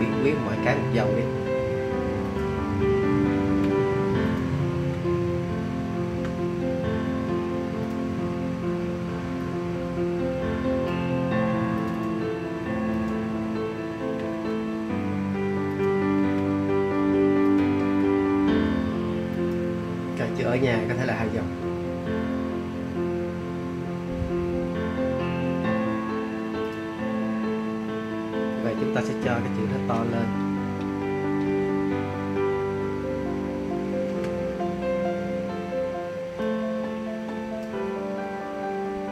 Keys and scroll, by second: 3.3 Return, 4.7 Return, 14.2 Return, 16.1 Return, 17.7 Return, 29.9 shift+super+., 30.4 shift+super+..